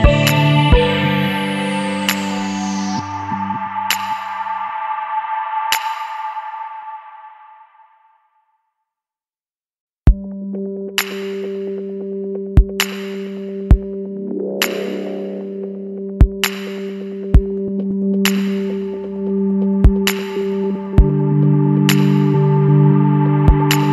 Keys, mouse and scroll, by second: 1.9 click, 4.8 click, 7.9 click, 12.3 click, 14.9 click, 15.7 click, 16.5 ctrl+click, 20.7 click, 23.4 click.